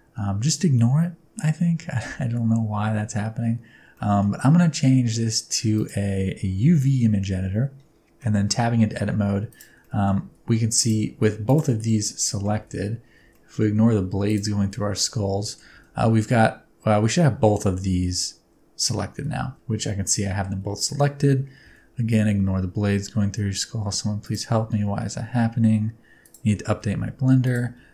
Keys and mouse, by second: 3.9 middle click, 5.8 click, 8.2 middle click, 8.7 Tab, 9.3 3, 9.5 click, 9.9 middle click, 10.2 alt+z, 11.2 alt+z, 11.4 middle click, 12.2 middle click, 12.5 alt+z, 13.2 alt+z, 13.3 middle click, 15.5 shift+middle click, 15.8 a, 19.4 alt+z, 19.5 middle click, 20.6 alt+z, 20.8 middle click, 21.8 s, 24.6 g, 26.6 s, 27.8 g.